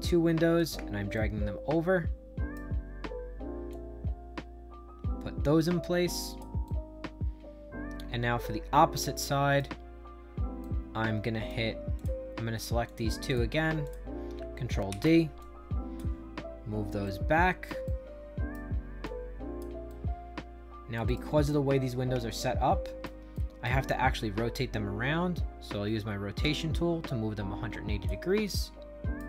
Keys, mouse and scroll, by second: 1.1-2.5 shift+right drag, 3.6-6.3 drag, 6.6-9.5 right drag, 10.5 right click, 11.9 click, 12.8 click, 13.2 click, 13.8 shift+click, 14.8 ctrl+d, 15.3 click, 16.2 middle click, 17.0 shift+right click, 17.8 right click, 19.0 click, 19.8-20.9 right drag, 21.0 right click, 21.4 right click, 22.1 shift+right click, 23.3 right click, 23.9-25.8 middle drag, 26.3-28.0 shift+drag, 28.4 right click.